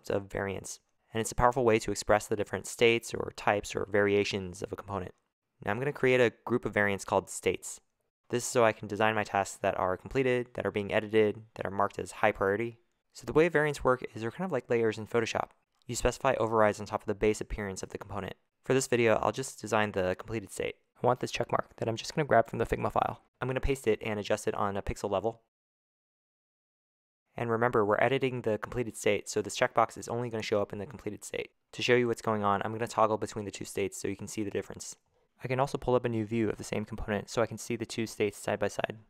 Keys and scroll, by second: 6.0-13.2 typing, 14.5-15.3 typing, 26.4 super+v, 27.9 typing, 29.4 0, 36.7 -.